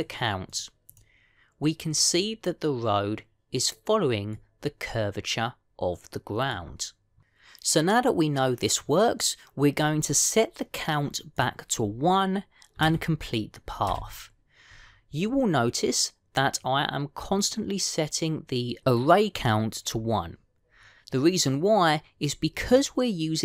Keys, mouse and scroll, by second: 0.1 click, 0.5 click, 1.3 click, 1.8 click, 5.2 middle click, 12.2 click.